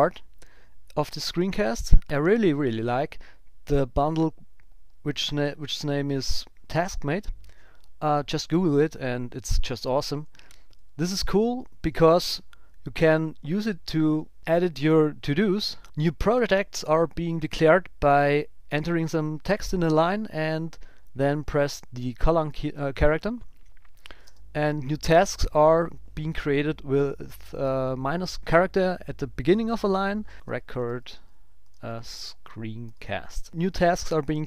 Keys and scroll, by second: 11.0 shift+z, 21.3 shift+;, 22.5 Return, 30.3 shift+r.